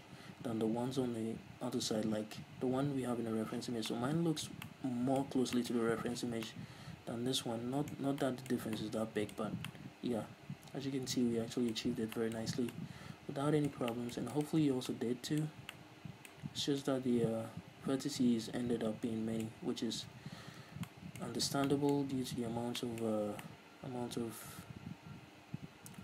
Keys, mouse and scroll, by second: 4.1-14.7 middle drag, 4.1 scroll down 2, 5.7 scroll up 2, 6.7 scroll down 2, 9.7-10.1 scroll up 2, 12.1-12.5 scroll up 2, 12.9 scroll down 2, 14.7 right click, 15.2 Tab, 15.4-26.0 middle drag, 15.8 scroll up 2, 16.9-17.2 scroll down 2, 20.1-20.4 scroll up 2, 20.4 a, 21.8 Tab, 21.9 scroll down 2, 22.6 Tab.